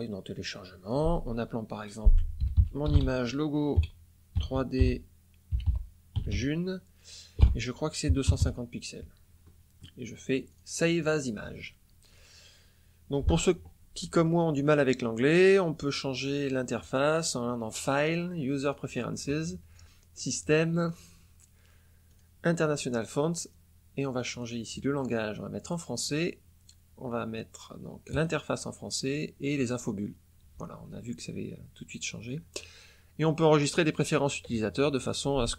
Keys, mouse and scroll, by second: 0.8 click, 2.3-6.3 typing, 8.0 KP_2, 8.2 KP_5, 10.4 click, 10.9 click, 16.7 click, 18.5 click, 20.1 click, 20.7-21.0 scroll down 1, 22.0 click, 23.5 scroll down 1, 24.3 click, 25.6 click, 28.1 click, 29.5 click.